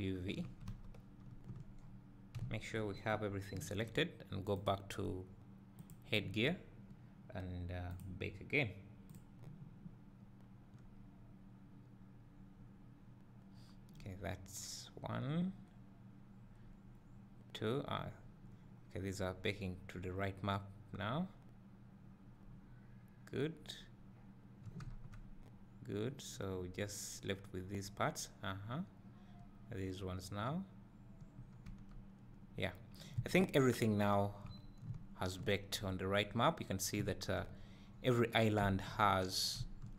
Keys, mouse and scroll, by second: 0.0 click, 0.7 a, 1.8 Tab, 1.9 scroll down 1, 2.4 `, 5.9-10.7 drag, 10.7 scroll down 1, 11.0 scroll up 1, 25.2 Tab, 31.9 Tab.